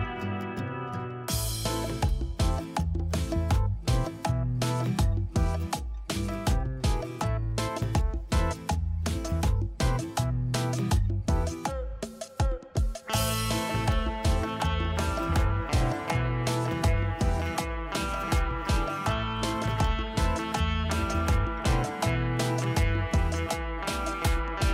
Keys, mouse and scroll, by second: 0.8 ctrl+space, 1.4 ctrl+space, 3.3 right click, 6.9 right click, 8.2 ctrl+s, 9.8 ctrl+s, 11.7 right click, 18.0 shift+click, 22.5 scroll up 1, 23.6 shift+click.